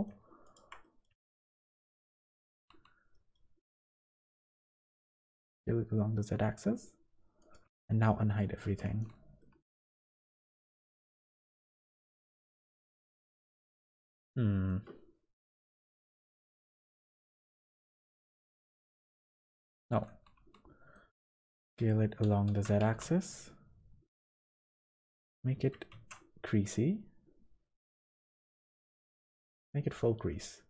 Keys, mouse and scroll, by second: 0.4 alt+shift+click, 0.8 middle click, 1.7 alt+shift+click, 2.1 middle click, 2.7 ctrl+z, 2.7 shift+middle click, 3.1 middle click, 4.0 s, 8.1 alt+h, 8.8 Tab, 9.4 middle click, 10.0 Tab, 10.7 middle click, 11.5 Tab, 11.9 scroll down 1, 12.8 middle click, 16.1 middle click, 18.7 ctrl+z, 19.3-19.9 ctrl+z, 20.5 middle click, 21.1 middle click, 22.5 s, 24.5 middle click, 25.0 middle click, 25.9 shift+e, 30.3 middle click.